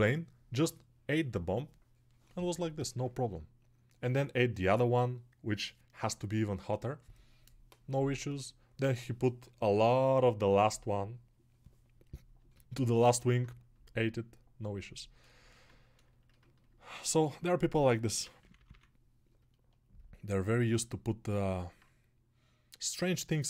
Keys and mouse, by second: 13.3-15.9 shift+right drag, 15.9-23.4 alt+shift+drag.